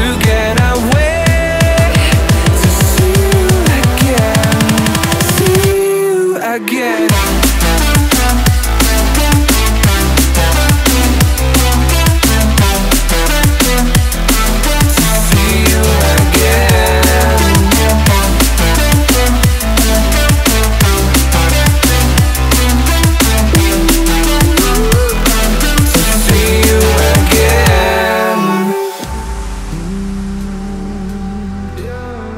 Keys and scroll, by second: 0.0 ctrl+t.